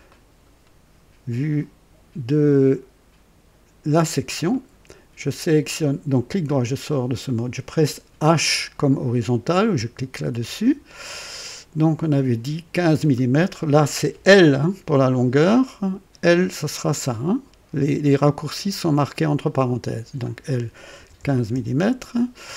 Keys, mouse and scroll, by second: 0.1 right click, 4.5 right click, 6.1 right click, 7.2 click, 10.3 typing, 11.9 click, 19.6 typing, 20.9 typing, 21.5 Return.